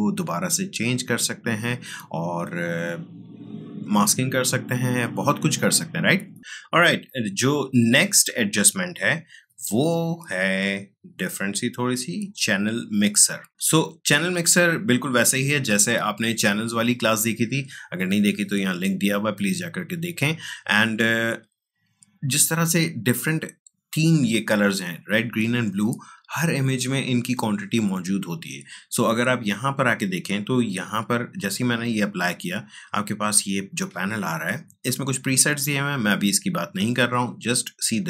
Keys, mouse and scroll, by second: 8.4-11.3 drag, 34.8 click.